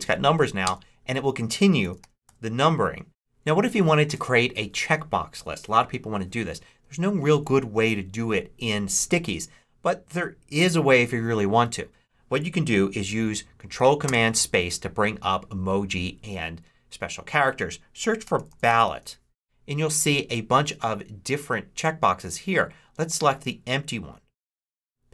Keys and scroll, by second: 0.5 Return, 1.5-3.0 typing, 13.9 ctrl+super+space, 17.9-19.3 typing.